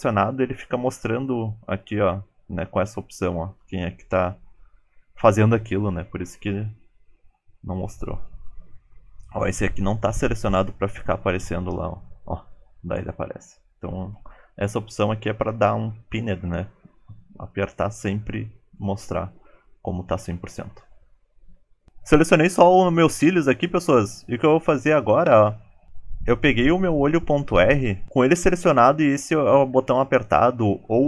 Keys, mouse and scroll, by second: 6.9 click.